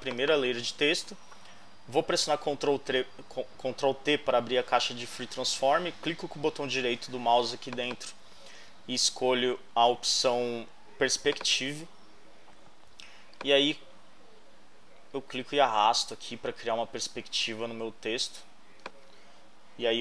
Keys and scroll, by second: 2.3 super+t.